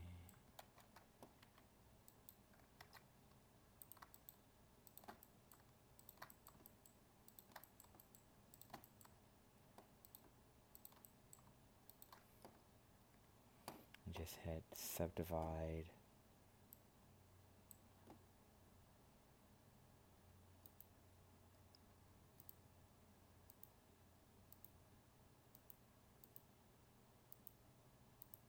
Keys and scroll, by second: 0.6 ctrl+z, 2.8 ctrl+Tab.